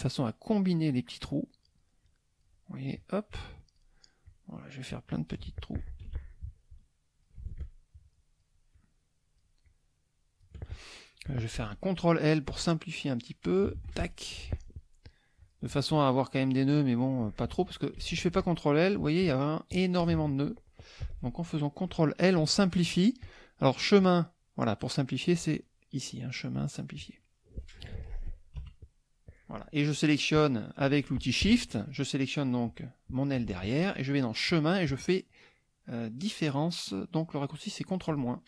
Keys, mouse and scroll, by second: 0.9-1.9 shift+drag, 2.0 shift+click, 3.0 shift+click, 4.3 shift+click, 6.0 ctrl+shift+z, 6.4 ctrl+shift+click, 7.6 shift+click, 8.7 shift+click, 9.7-10.6 shift+drag, 13.8 ctrl+l, 15.4 click, 18.0 ctrl+z, 18.3 ctrl+click, 18.9 ctrl+click, 20.0 click, 23.2 click, 27.0 click, 28.5 KP_Subtract, 29.1 middle click, 29.1-29.5 scroll down 1, 31.7 shift+click, 34.5 click, 38.1 click.